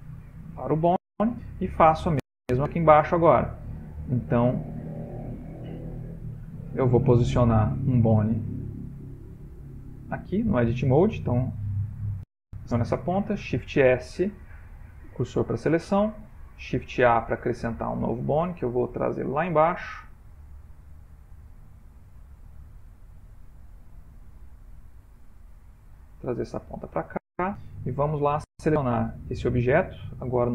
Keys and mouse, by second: 0.2 ctrl+middle click, 0.2 ctrl+middle click, 1.2 shift+middle click, 1.3 shift+middle click, 2.3 middle click, 4.4 middle click, 5.6 ctrl+middle click, 6.6 middle click, 7.9 middle click, 8.2 ctrl+middle click, 8.9 click, 10.7 Tab, 11.7 click, 13.4 shift+s, 14.6 shift+s, 16.9 shift+a, 17.6 ctrl+middle click, 18.0 ctrl+middle click, 19.0 ctrl+middle click, 19.8 g, 22.6 ctrl+middle click, 24.9 g, 28.2 middle click, 28.4 middle click, 28.5 middle click, 29.9 Tab, 30.1 click.